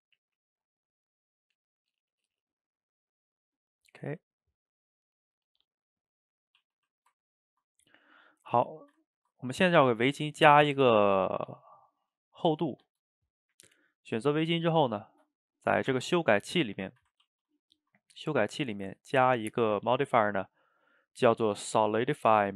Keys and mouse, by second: 6.8 a, 7.2-8.9 ctrl+middle drag, 8.9 shift+right drag, 9.1-13.1 ctrl+middle drag, 13.1 click, 15.7 click, 17.0-17.3 shift+middle drag, 17.3 ctrl+s, 17.8 shift+middle click, 18.3-21.3 drag.